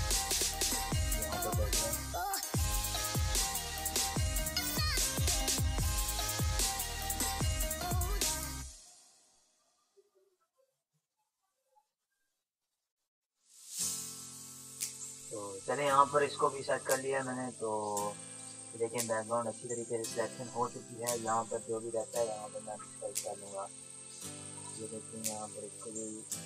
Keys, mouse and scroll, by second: 0.7 click, 1.9 ctrl+[, 2.5 click, 2.5 click, 5.5 Down, 7.5 click, 8.5 Up, 11.5 click, 11.6 click, 15.1 ctrl+-, 15.5 ctrl+=, 16.2 ctrl+space, 16.4 click, 16.6 ctrl+=, 17.1 ctrl+click, 17.8 ctrl+-, 17.9 ctrl+space, 18.0 click, 18.4 space, 20.1 click, 21.0 e, 21.4 click, 22.4 ctrl+z, 24.0 [, 24.4 [, 24.6-26.4 drag.